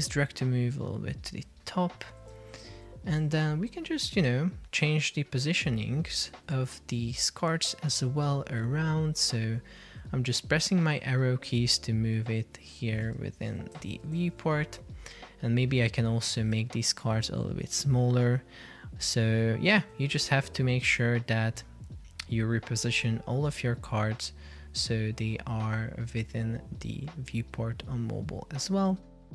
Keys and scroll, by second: 0.1 shift+Up, 2.6 shift+Down, 3.3 Down, 13.3 shift+Left, 13.9 shift+Right, 14.5 shift+Down, 16.7 shift+Right.